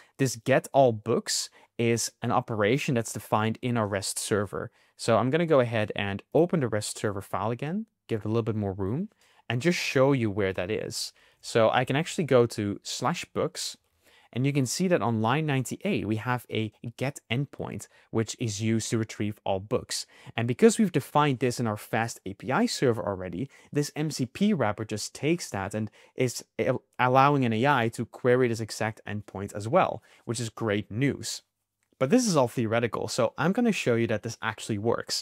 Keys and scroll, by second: 11.2 super+f.